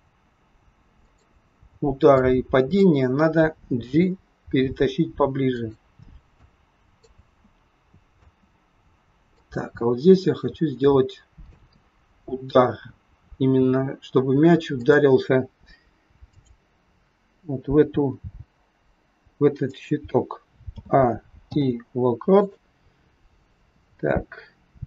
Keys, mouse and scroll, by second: 3.8 click, 3.8 g, 6.3 click, 6.9 space, 8.1 space, 9.3 click, 14.7 click, 18.2 click, 18.2 g, 20.7 a, 21.4 i.